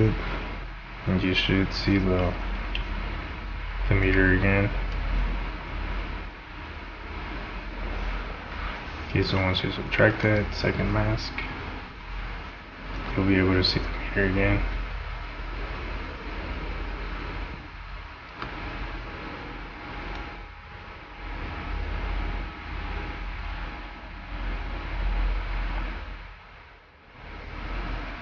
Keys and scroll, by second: 2.8 v, 13.0 space, 18.3 space.